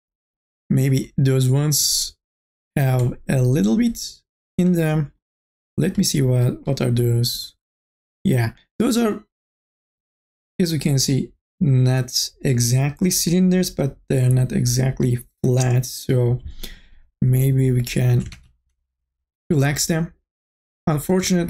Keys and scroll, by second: 18.6 ctrl+z.